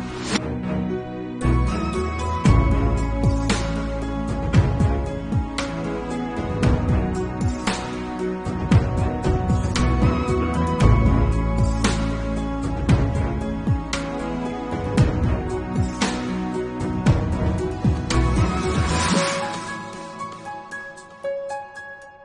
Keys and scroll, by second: 1.8 6, 6.2-6.9 typing, 7.0 Return, 8.8 8, 9.0 [, 10.0 ctrl+z, 12.4-12.7 typing, 12.7 Return, 14.6 [, 14.9 ], 19.1 Left, 21.4 v.